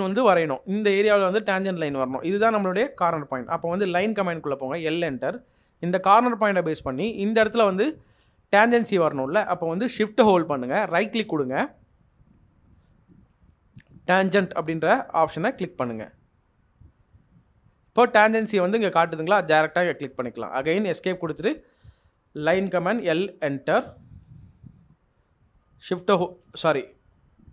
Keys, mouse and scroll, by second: 3.8 l, 19.8 Escape, 20.0 middle click, 23.0 l, 24.2 Return.